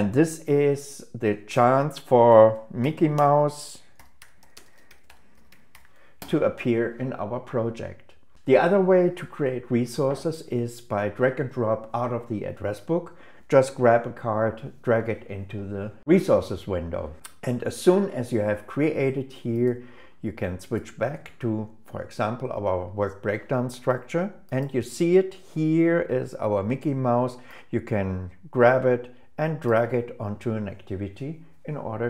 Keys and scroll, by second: 2.5 shift+m, 5.1 shift+m.